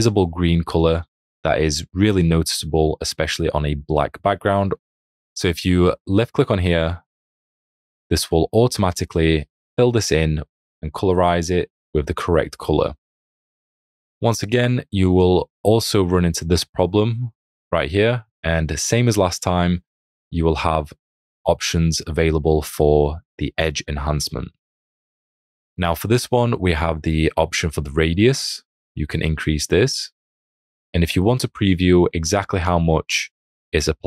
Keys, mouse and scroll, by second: 14.5 click, 14.5 space, 19.2 space.